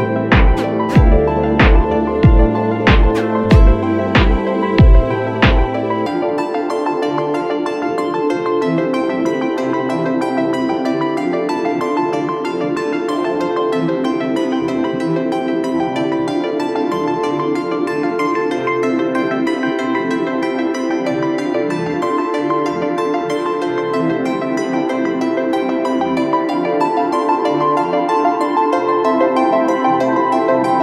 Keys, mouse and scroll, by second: 17.2 alt+shift+click, 21.6 alt+shift+click, 26.5 ctrl+click.